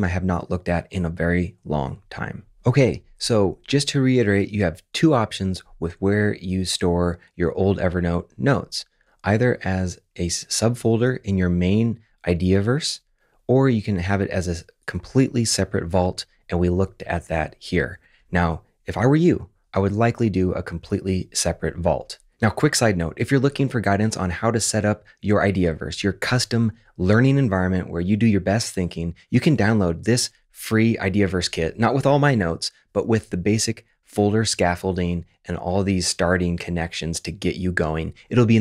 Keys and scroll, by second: 15.9 super+`.